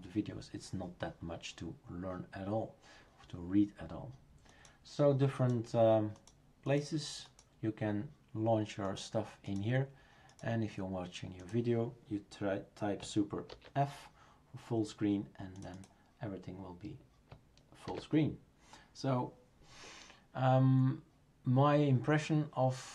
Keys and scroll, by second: 13.5 super+f, 17.9 super+f.